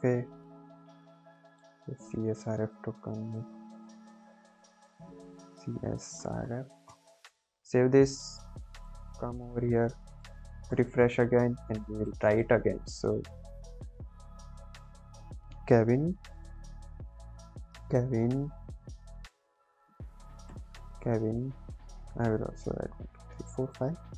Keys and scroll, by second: 3.9 Return, 4.3 Up, 4.5 Tab, 5.4-6.9 typing, 7.2 ctrl+s.